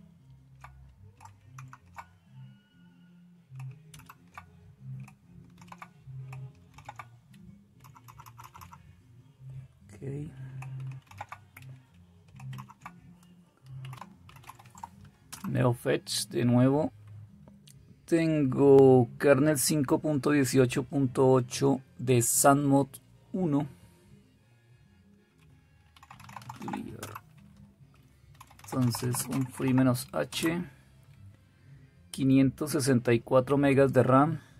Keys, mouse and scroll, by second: 1.1 super+Return, 1.5 shift+super+Left, 3.8 super+Return, 5.5 super+e, 6.7 super+r, 7.7 Up, 8.0 Up, 8.2 Up, 8.4 Up, 8.5-8.8 Up, 11.6 super+r, 11.6-14.9 typing, 15.3 Return, 25.7-30.2 typing.